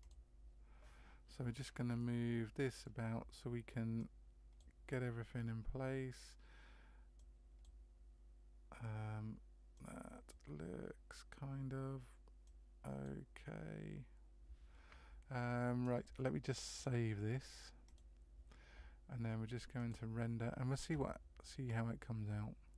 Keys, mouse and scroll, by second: 0.0 click, 1.9 middle click, 4.4 click, 7.7 click, 9.7 click, 13.0 click, 16.7 click, 21.1 click.